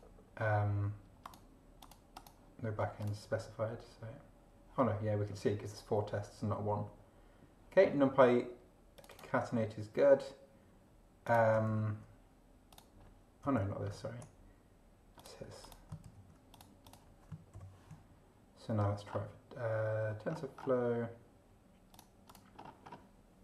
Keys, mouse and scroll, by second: 1.2 click, 1.8 click, 2.2 click, 3.0 click, 9.0 click, 11.2 click, 11.7 ctrl+v, 12.7 click, 13.6 ctrl+z, 15.2 click, 15.6 click, 16.0 ctrl+v, 16.5 ctrl+click, 16.8 ctrl+click, 17.5 shift+0, 19.0 scroll down 2, 20.3 scroll down 2, 21.9 click, 22.3 click.